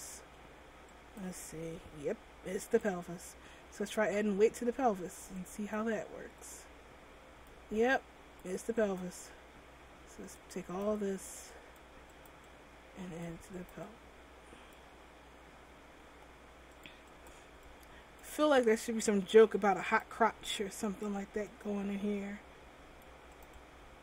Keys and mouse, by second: 1.9 m, 9.0-15.5 middle drag, 15.7 click, 16.9 click, 17.4 middle click, 19.4 m, 21.0 m, 23.6 right click.